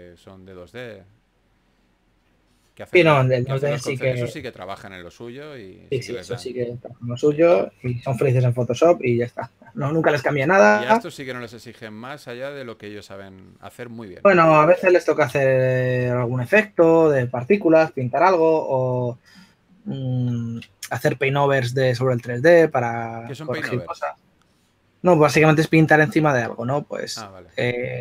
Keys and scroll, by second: 0.0-1.1 typing, 4.3 4, 8.3 s, 11.6 s, 15.9 shift+f, 16.1 shift+f.